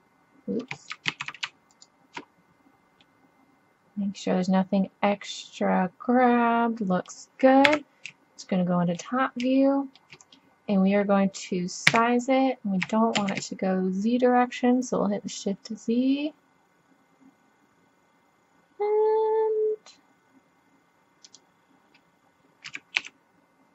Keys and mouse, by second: 1.1 ctrl+z, 1.7 click, 2.3 middle click, 3.1 middle click, 4.2 middle click, 5.4 middle click, 6.3 middle click, 7.7 KP_7, 8.2 middle click, 11.4 middle click, 11.9 s, 22.7 s.